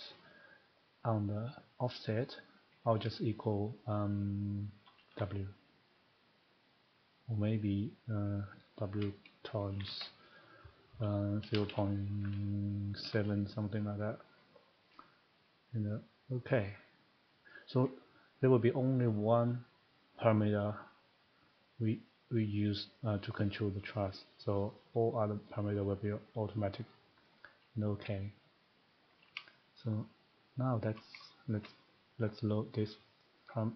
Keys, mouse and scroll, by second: 2.2 click, 5.1 w, 9.8 *, 11.5 typing, 13.0 7, 14.2 click, 17.8 click, 27.2-30.4 drag, 31.0 shift+middle click, 31.6 shift+middle click, 33.3 click.